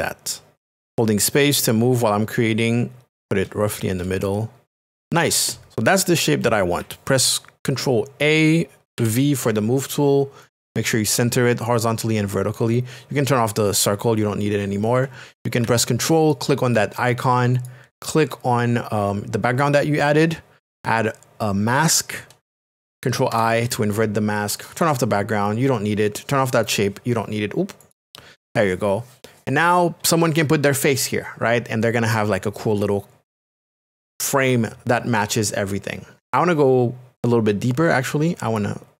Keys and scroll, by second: 1.2 space, 4.5 space, 7.1 ctrl+a, 9.0 a, 23.3 ctrl+i, 24.7 i.